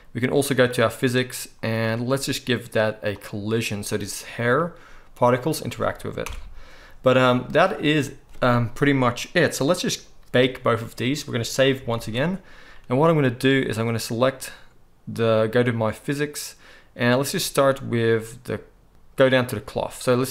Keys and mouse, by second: 0.8-3.3 right drag, 3.3-6.0 middle drag, 6.2 shift+Left, 11.8 ctrl+s, 12.0 ctrl+s.